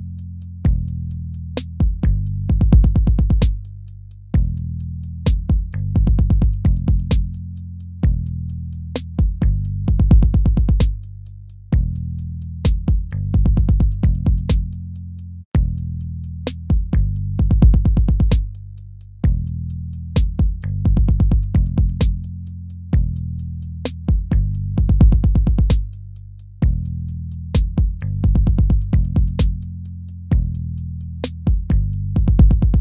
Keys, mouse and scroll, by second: 0.2 ctrl+v, 0.8 ctrl+v, 1.5 ctrl+v, 2.2 ctrl+v, 3.4 ctrl+-, 4.0 ctrl++, 10.1 ctrl++, 17.9 ctrl+-, 18.4 ctrl++, 19.8 ctrl++, 30.0 ctrl+z.